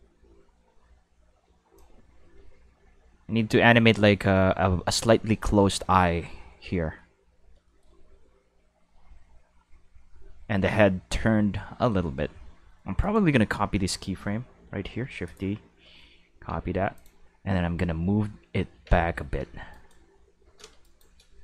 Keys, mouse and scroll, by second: 1.7-4.9 drag, 13.0 right click, 14.7 shift+d, 15.2 click, 16.4 shift+s, 16.9 click, 18.7 Tab, 19.0 shift+middle drag, 19.4 Tab, 19.7 right click, 20.8 shift+right click.